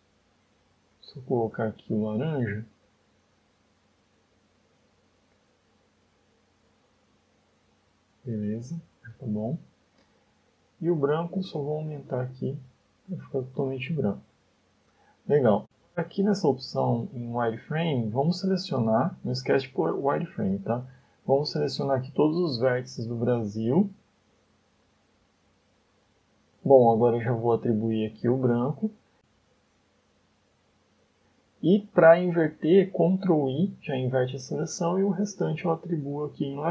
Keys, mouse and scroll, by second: 1.3 click, 10.9 click, 11.6 click, 14.8 KP_7, 16.3 click, 17.1 Tab, 17.7-18.0 scroll up 3, 18.3 shift+middle click, 20.3 scroll down 1, 20.5 shift+middle click, 21.0 a, 21.3 a, 22.5 b, 23.9-24.5 scroll up 6, 25.3 b, 26.3-26.6 scroll down 6, 27.2 scroll down 1, 29.1 click, 30.2 shift+middle click, 31.5 shift+middle click, 33.7 ctrl+i, 36.1 click.